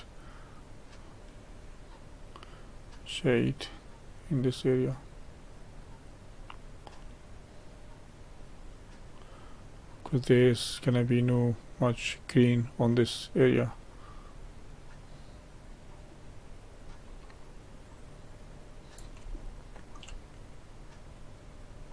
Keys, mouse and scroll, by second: 19.3-20.4 shift+middle drag, 20.4-21.9 drag.